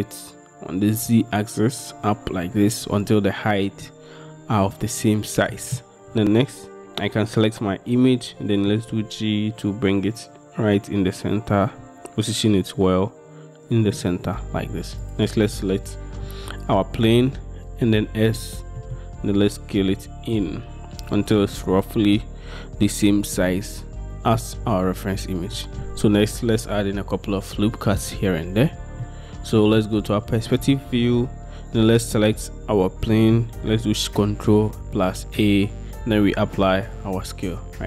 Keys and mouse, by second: 9.0 g, 15.1-18.2 drag, 18.2 s, 18.8-21.2 drag, 29.1-29.8 drag, 30.8 shift+drag, 35.2 ctrl+a.